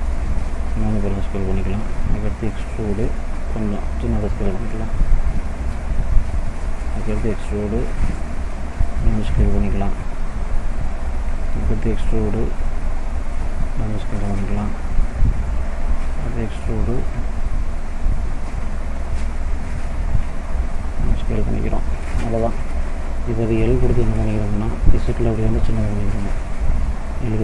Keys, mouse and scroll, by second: 0.2 s, 1.9 e, 3.4 s, 7.3 e, 8.7 s, 11.4 e, 13.0 s, 15.8 e, 17.3 s, 21.2 middle click, 22.4 middle click, 24.2 l, 25.4 z.